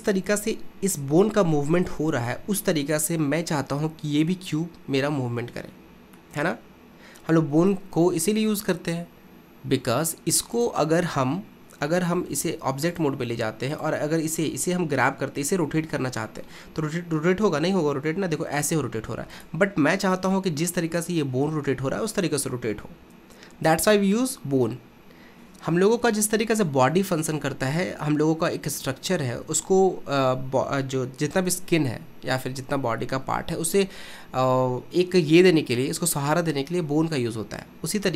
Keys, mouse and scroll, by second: 6.2-10.4 middle drag, 11.0 click, 12.3 ctrl+Tab, 12.9 click, 16.0-17.5 middle drag, 17.5 r.